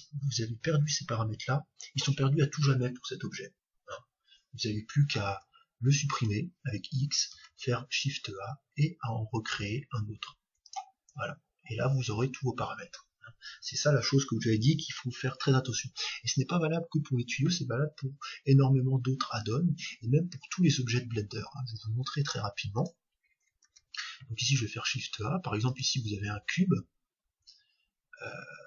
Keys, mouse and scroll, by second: 5.3 x, 7.3 shift+a, 23.6 shift+a.